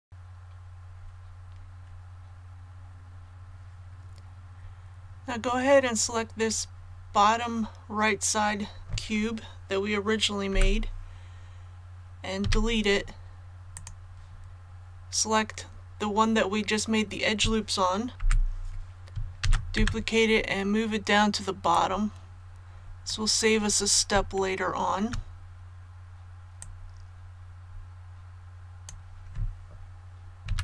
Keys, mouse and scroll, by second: 12.3 x, 13.7 click, 19.4 shift+d, 21.7-23.5 drag, 23.5 scroll up 1, 24.4-24.9 shift+scroll up 2, 26.6-29.5 drag, 30.5 a.